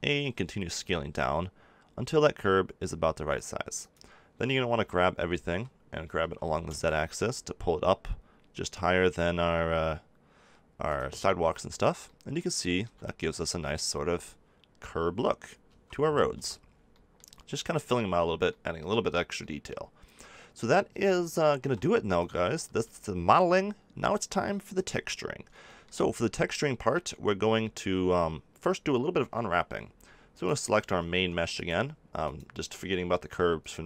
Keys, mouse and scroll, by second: 3.9-5.8 drag, 5.1 a, 5.4 a, 6.1 g, 10.9 click, 11.8-15.2 middle drag, 15.6 a, 16.0 Tab, 16.3 Tab, 21.5 KP_7, 22.7 z, 25.6 click, 25.8 click, 27.3 z, 31.1 Tab.